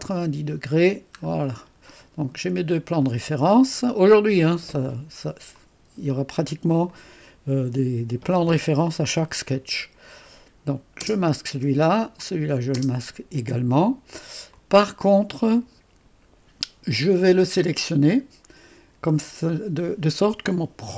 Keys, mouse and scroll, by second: 1.2-2.7 scroll down 1, 2.4-3.2 typing, 2.7 click, 3.9-6.0 drag, 5.8-6.5 typing, 6.9 click, 11.0 space, 12.2 click, 12.8 space, 14.5-16.3 drag, 17.9 click.